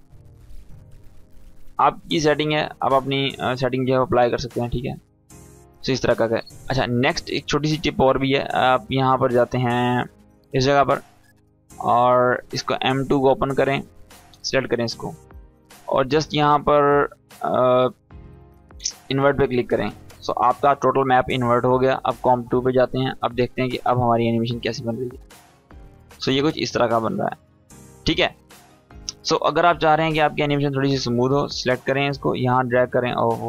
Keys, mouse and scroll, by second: 0.0-0.5 click, 0.3 space, 2.0 scroll down 1, 2.5 space, 2.8 scroll down 1, 3.7-4.3 click, 4.2 space, 7.8 click, 12.1 click, 16.5-17.5 drag, 21.5 click, 24.2 space, 25.5-26.7 click, 26.6 space, 27.7-28.3 click, 28.6 =, 28.8 =, 30.0-30.6 drag.